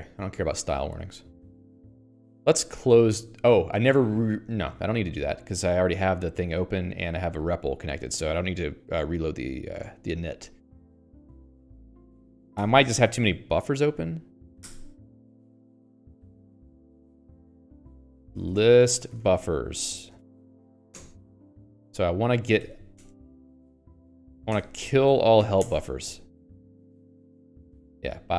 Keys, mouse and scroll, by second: 7.3 ctrl+g.